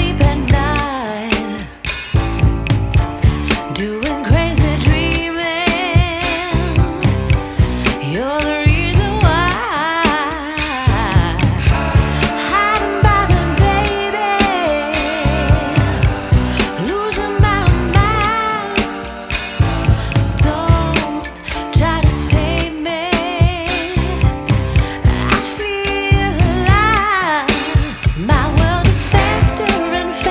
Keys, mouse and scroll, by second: 0.7 click, 8.9 click, 15.3 click, 21.3 scroll up 1, 21.5 scroll down 1, 23.0-23.7 scroll up 1, 23.7 scroll down 1, 26.7 click, 29.3 F10.